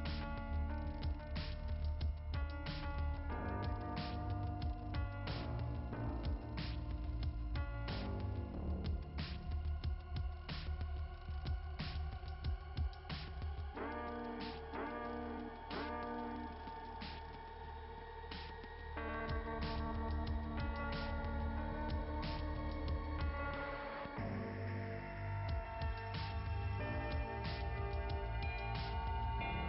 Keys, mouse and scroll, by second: 2.3 click, 11.3 click, 11.6 click, 21.8 click, 23.6 click, 25.7-28.2 typing, 28.1 click.